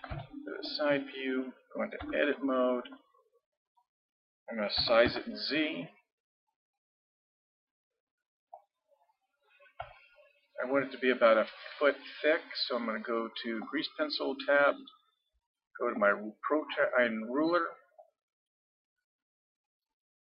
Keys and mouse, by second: 0.1 ctrl+KP_3, 2.0 Tab, 4.8 s, 9.2-13.6 middle drag, 13.6-15.4 drag, 16.0-20.2 drag.